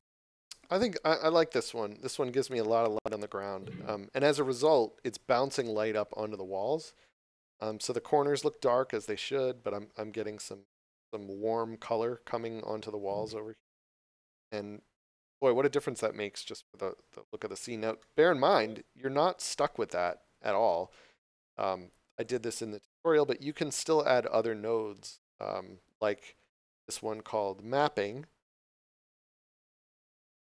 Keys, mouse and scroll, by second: 18.0 shift+middle click, 18.5 scroll down 1, 22.2 click, 25.2 click, 26.8 m, 28.9 click.